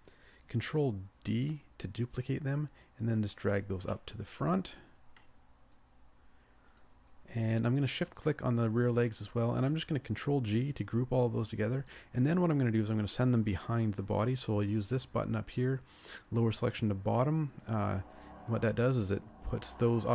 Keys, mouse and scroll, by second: 1.3 ctrl+d, 3.9 middle click, 8.0 shift+click, 8.9 shift+click, 10.5 ctrl+g.